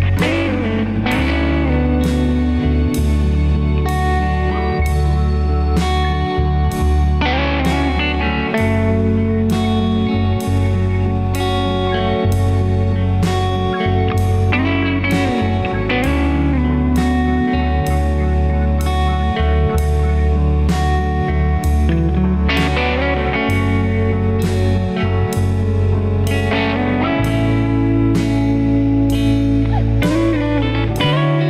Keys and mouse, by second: 0.3 middle click, 1.3 Tab, 3.0 Tab, 3.6 alt+z, 4.1 Tab, 9.4 click, 9.8 Tab, 11.0 Tab, 14.2 Tab, 15.5 Tab, 15.9 Tab, 24.1 click, 25.5 click, 26.5-29.7 middle drag, 29.8 Tab, 30.7-31.4 middle drag.